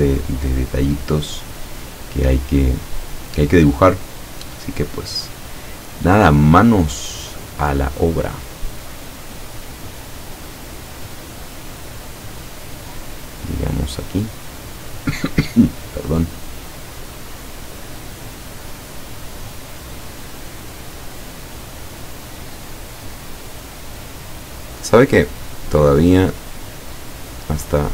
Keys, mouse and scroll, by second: 5.3 click, 6.7 click, 11.6 click, 12.9 click, 17.0 click, 20.9 click, 25.0 click, 27.2 click.